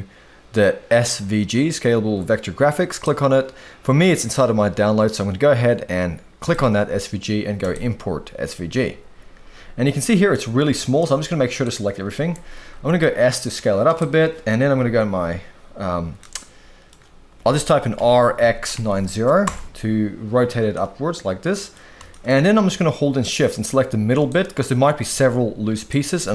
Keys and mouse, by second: 10.0-10.3 middle drag, 10.9 click, 12.8 s, 14.7 KP_3, 16.1-16.9 middle drag, 17.9 r, 18.4 x, 18.7 9, 18.7 0, 19.4 Return, 20.7-21.7 middle drag, 22.1 shift+middle drag, 23.5 shift+click, 24.1 shift+click, 25.1 g.